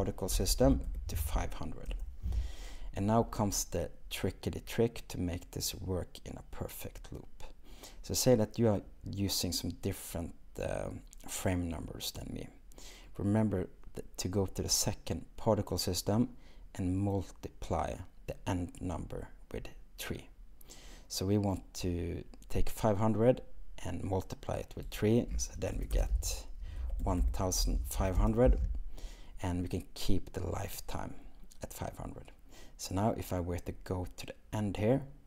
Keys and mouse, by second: 24.9-28.3 drag, 25.9 BackSpace, 33.3-33.7 drag.